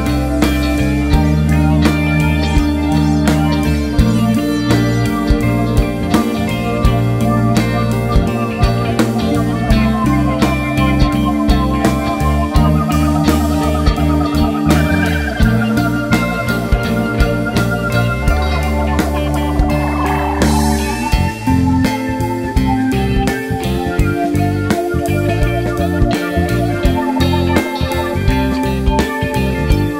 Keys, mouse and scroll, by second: 0.1 `, 0.2 scroll up 1, 0.3 `, 0.7 scroll down 1, 0.9 KP_0, 1.1 scroll up 1, 4.1 click, 4.4 click, 7.3-18.9 drag, 8.8 scroll up 1, 9.7-10.2 scroll down 1, 20.8-29.9 drag, 25.1 scroll down 1, 25.4 KP_1, 26.8-27.1 scroll down 1, 27.3 scroll up 1, 28.7 scroll down 1.